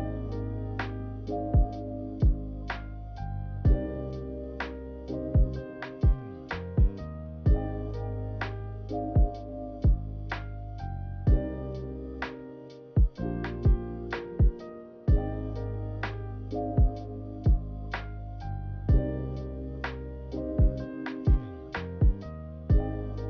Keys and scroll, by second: 8.1 Delete, 9.9-10.9 typing, 17.0 0.